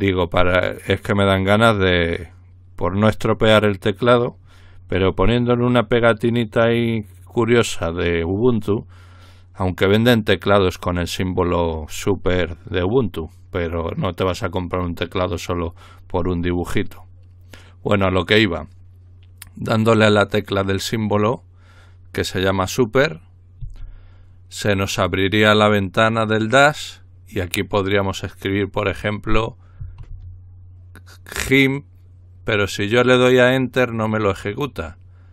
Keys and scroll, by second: 29.8 typing.